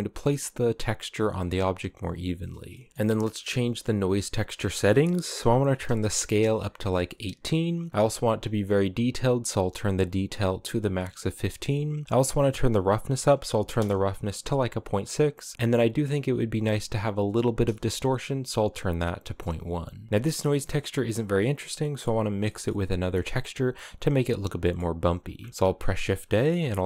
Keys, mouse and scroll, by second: 2.4 middle click, 2.9-4.3 scroll up 2, 4.3-7.5 drag, 7.7-10.4 drag, 11.7-14.5 drag, 15.5-16.5 drag, 20.1-20.5 scroll up 2, 20.5-21.5 scroll down 2, 21.5 middle click, 22.0 scroll down 2, 22.2-25.1 middle drag, 25.1 shift+a.